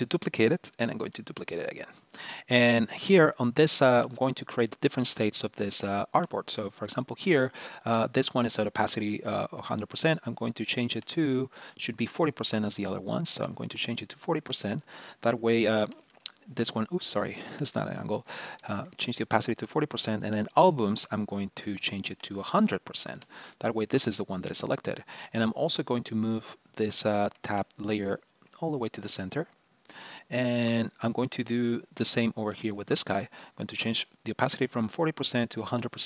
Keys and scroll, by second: 0.8 super+d, 16.4 super+z.